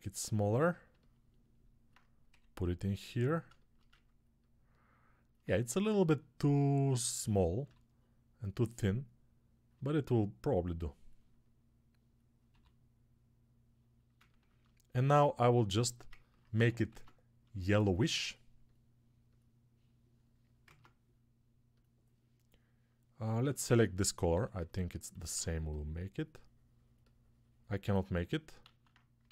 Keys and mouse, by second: 2.2 g, 7.5-9.6 drag, 7.5 g, 9.6-23.0 alt+middle drag, 12.4-14.0 drag, 12.4 g, 16.7 ctrl+Tab, 20.5 ctrl+Tab, 23.0-29.3 alt+drag, 23.4 alt+q, 24.2 s, 25.1 alt+q, 28.5 alt+q.